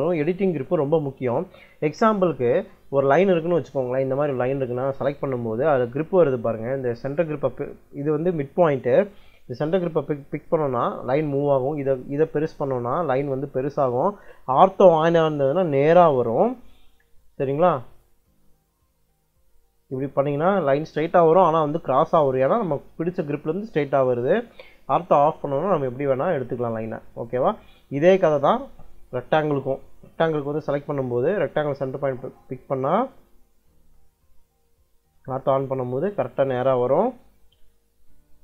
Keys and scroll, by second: 14.8 ctrl+l, 25.6 ctrl+l, 34.9 ctrl+l.